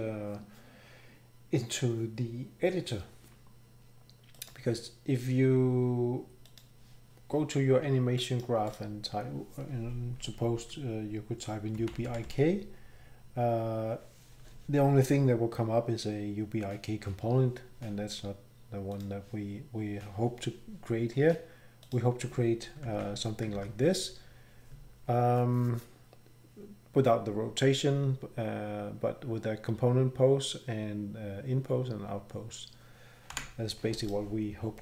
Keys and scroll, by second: 11.5-12.8 typing, 22.9 ctrl+c, 23.5 ctrl+v, 33.3 Delete.